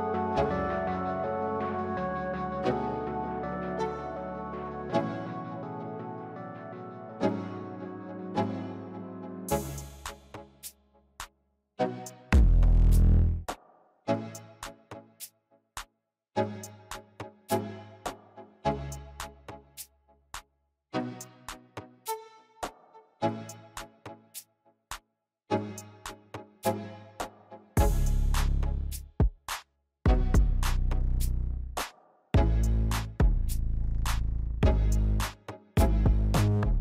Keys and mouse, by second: 9.9-12.3 drag, 15.8-18.7 drag, 23.6 click, 25.3 drag, 26.0 click, 34.0-35.8 drag.